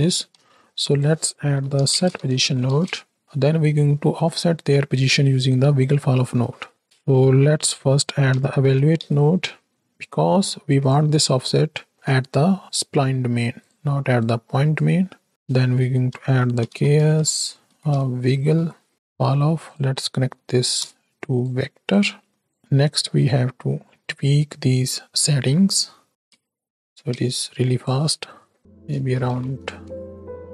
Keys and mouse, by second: 0.1 shift+a, 3.2-10.8 drag, 11.3-11.9 middle drag, 12.6-13.6 drag, 14.3 click, 15.3-19.7 drag, 20.9 ctrl+click, 21.9 click, 23.2-23.8 middle drag, 24.9 middle click, 25.9 middle click, 26.2 space, 27.1 space, 27.8 click, 28.6 KP_0, 29.1 shift+Right, 29.2 shift+Left, 29.8 space.